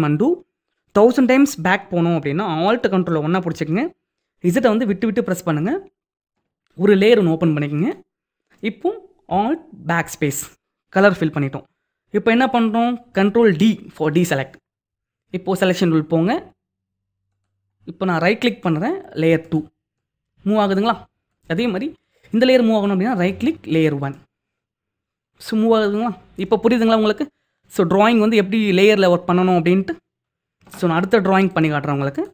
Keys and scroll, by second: 4.4 ctrl+alt+z, 9.9 alt+BackSpace, 13.9 ctrl+d.